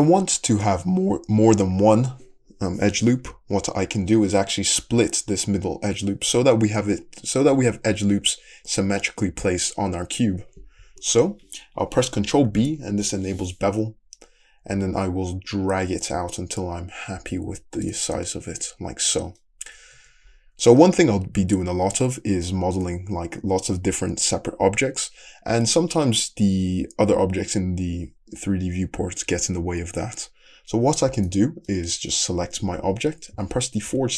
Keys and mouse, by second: 11.4-14.0 ctrl+drag, 12.6 ctrl+b, 19.0-20.0 middle drag, 20.0 Tab, 20.2 middle click, 23.0-34.1 middle drag, 33.9 /.